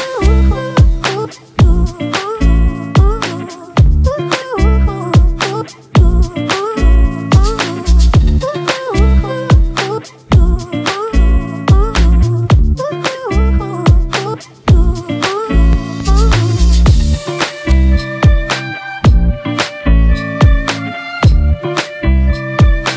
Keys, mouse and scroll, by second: 9.9 double click, 14.7-15.5 ].